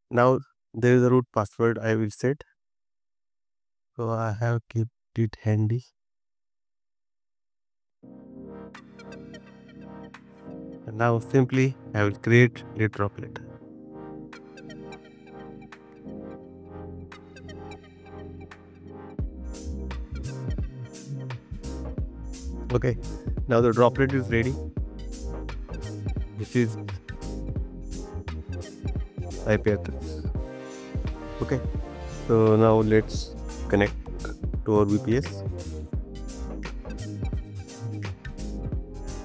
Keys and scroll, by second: 6.2 super+c, 27.5-29.6 typing, 29.8 super+v, 36.8 shift+@, 37.3 super+v.